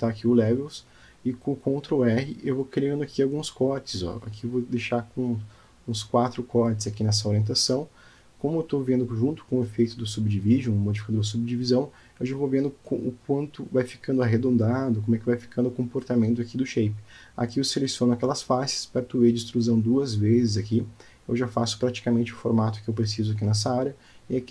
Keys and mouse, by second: 0.1 click, 1.3 Tab, 3.4 ctrl+z, 3.4 ctrl+r, 11.8 ctrl+r, 14.6 click, 16.7 middle click, 17.5 Tab, 18.3 click, 18.7 click, 19.3 shift+click, 19.7 alt+middle click, 20.5 shift+middle click, 21.0 shift+middle click, 21.6 e, 23.0 e.